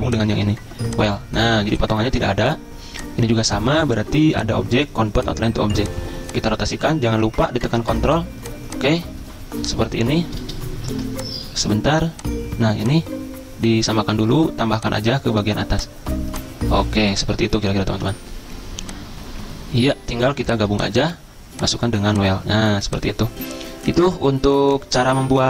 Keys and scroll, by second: 10.5 b, 10.9 ctrl+z, 17.6 Right, 17.9 Left.